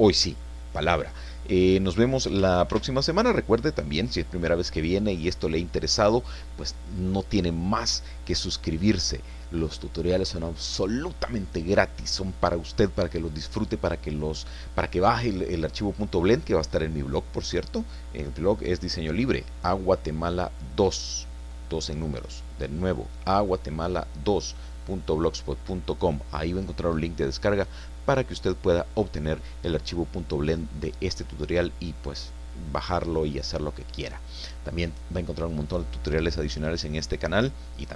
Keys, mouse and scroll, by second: 2.7 ctrl+s, 3.0 ctrl+click.